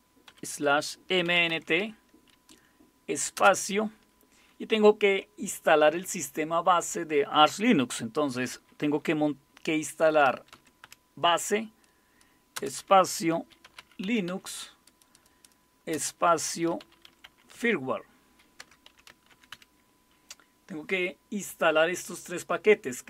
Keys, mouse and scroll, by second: 0.3-2.3 typing, 3.3 typing, 9.8-11.3 typing, 12.5-14.8 typing, 15.9-20.0 typing.